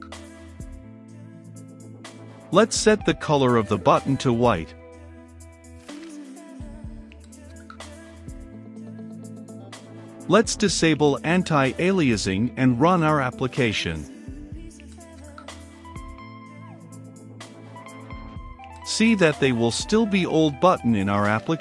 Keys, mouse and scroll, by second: 2.0 Return, 2.3 typing, 3.8 Return, 4.8 shift+`, 5.5 shift+3, 5.7 f, 8.4 click, 9.1 Return, 9.3 a, 9.4 n, 9.6 t, 10.1 Return, 11.7-12.2 typing, 13.6-21.6 drag.